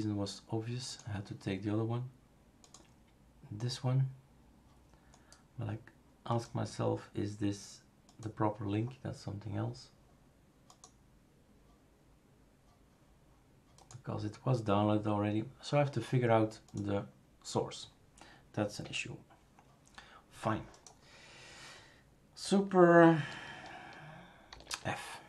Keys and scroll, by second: 18.8 F11, 24.5 super+f.